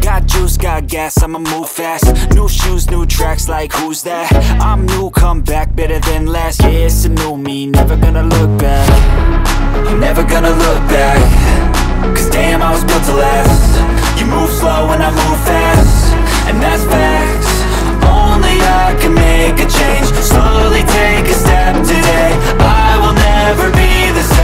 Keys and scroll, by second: 9.8 7, 12.4 KP_Add, 14.2 ctrl+z, 18.2 1, 18.8 0, 19.2 Return, 21.7 ctrl+Page_Down.